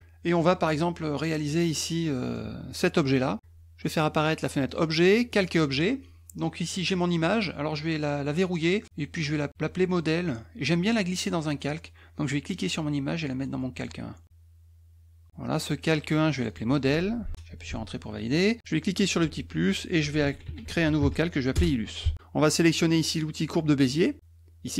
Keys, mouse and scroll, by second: 0.4-1.5 middle drag, 2.1 middle click, 4.7 click, 5.3 click, 6.7 click, 8.4 click, 12.3-13.8 drag, 16.3 click, 16.5 click, 18.9 click, 19.9-21.5 typing, 21.5 Return.